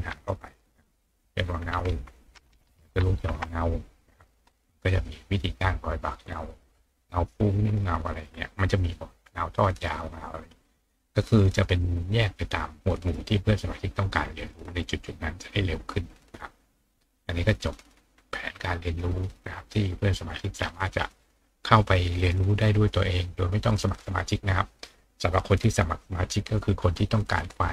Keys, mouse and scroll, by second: 5.2 scroll down 2, 6.2 scroll down 2, 7.6-8.6 scroll down 4, 12.6-14.0 scroll up 2, 16.8 click, 18.1-19.1 middle drag, 18.1-19.1 scroll up 1, 19.3 click, 20.3 middle click, 20.3-21.7 scroll up 2, 20.6-21.9 middle drag, 21.7 scroll up 1.